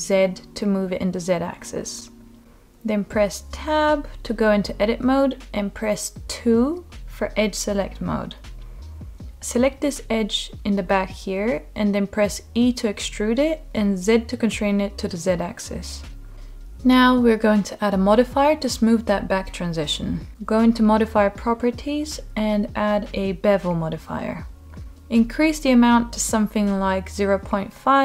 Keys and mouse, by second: 0.9 g, 1.5 z, 4.5 click, 5.8 Tab, 8.5 2, 11.8 e, 13.2 z, 15.8 click, 16.7 middle click, 18.7-20.5 drag, 21.0-22.0 middle drag, 23.1 click, 23.9-24.3 middle drag, 25.2-27.3 drag, 27.6-28.0 middle drag.